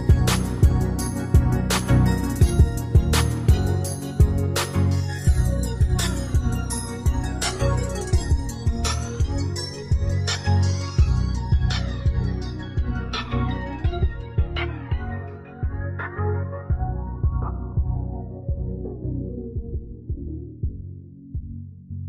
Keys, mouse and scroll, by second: 11.2 shift+click, 15.1 ctrl+scroll up 1.